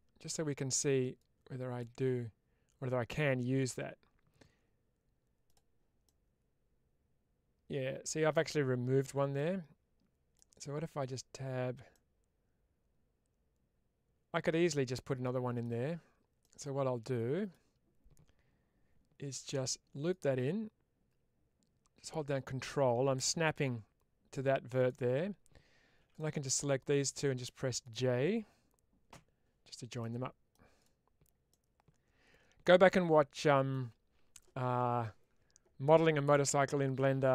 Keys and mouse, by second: 1.0 click, 5.3 click, 5.9-8.1 middle drag, 9.2 middle click, 11.8-15.5 middle drag, 15.7 Tab, 16.3-17.4 middle drag, 25.9 1, 26.0 click, 29.0 j, 29.9 middle click, 31.3-33.6 middle drag.